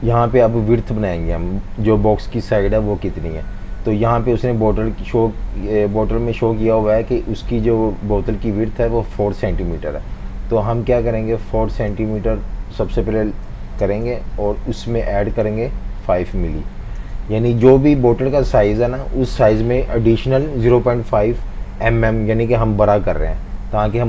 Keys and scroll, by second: 13.5 4, 13.8 Return, 16.0-17.3 typing.